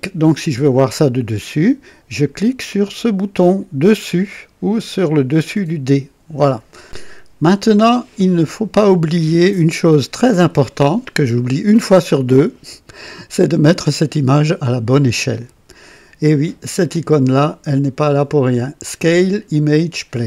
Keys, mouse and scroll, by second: 5.5 click, 6.8 click.